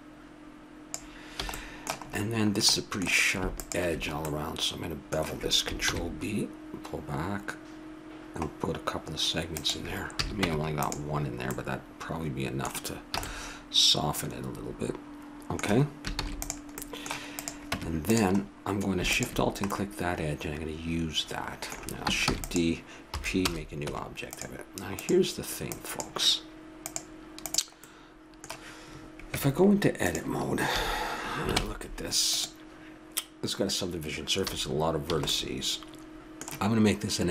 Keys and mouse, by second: 1.4 a, 1.5 middle click, 1.7 middle click, 3.6-5.5 right drag, 5.8 ctrl+b, 10.2 a, 10.4 Tab, 13.2 a, 16.2 ctrl+s, 17.4-19.0 right drag, 17.7 Tab, 19.4 right click, 19.7-21.0 middle drag, 22.3 shift+d, 23.1 p, 24.0 Tab, 24.9-28.7 drag, 27.9 middle click, 29.3 Tab, 30.7 a, 31.6 ctrl+Tab, 34.5 a, 35.1 a, 35.3-37.3 middle drag.